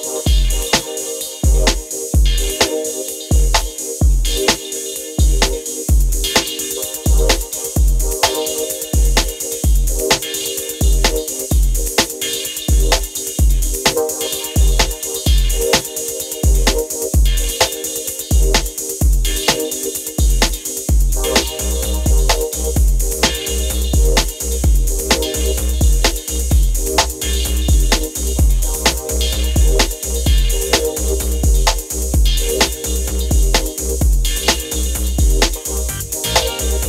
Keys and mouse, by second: 10.1-14.6 drag, 15.1 middle click, 17.9 click, 18.1 click, 18.3 click, 18.4-19.7 middle drag, 19.8-20.9 drag, 23.7-26.3 drag, 26.9-28.7 drag, 32.7-34.6 drag.